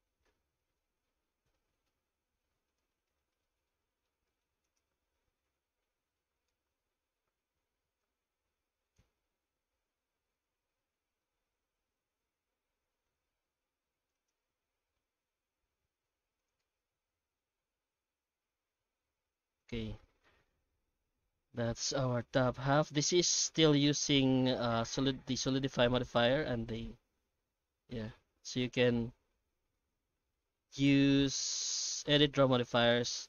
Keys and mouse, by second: 0.2 r, 3.0 middle click, 3.4 Tab, 3.8 middle click, 4.3 shift+middle click, 4.6 right click, 4.8 Tab, 5.7 ctrl+r, 8.7 ctrl+r, 10.8 Tab, 11.2 middle click, 12.0 Tab, 12.6 ctrl+r, 14.5 alt+s, 16.6 Tab, 17.1 alt+a, 17.4-18.6 middle drag, 19.0 shift+middle click, 19.5 alt+middle click, 20.2 shift+middle click, 20.7 middle click, 21.8 shift+middle click, 22.5 right click, 22.8 Tab, 23.1 middle click, 23.8 shift+middle click, 25.3 middle click, 26.8 ctrl+shift+x, 30.1 ctrl+shift+x.